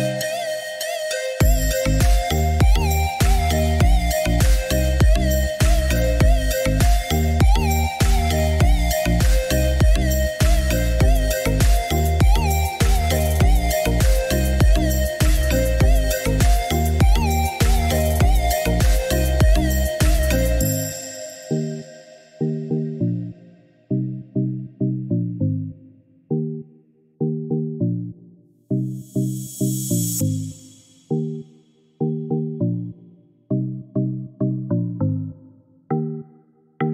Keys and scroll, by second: 13.4 1, 13.5 0, 13.6 Return, 15.0 Escape.